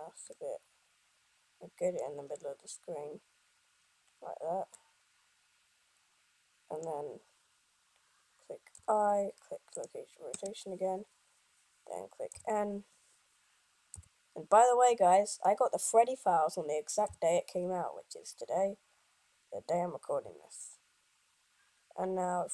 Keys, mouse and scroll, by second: 9.6 i.